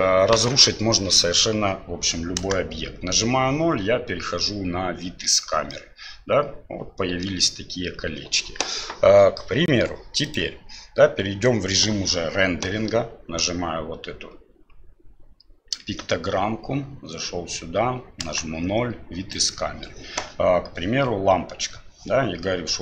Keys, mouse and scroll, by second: 2.4 KP_0, 5.7-7.2 middle drag, 10.7 click, 15.8 KP_1, 18.2 KP_0, 19.3 right click.